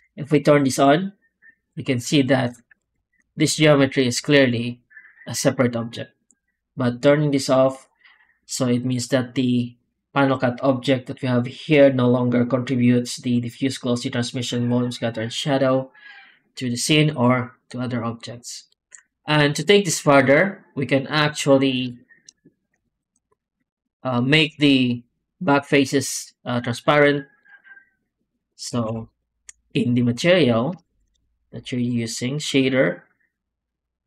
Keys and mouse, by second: 2.7 alt+shift+z, 19.6 shift+middle click, 22.8 alt+click, 28.7 alt+a, 29.1 click, 30.8 alt+a.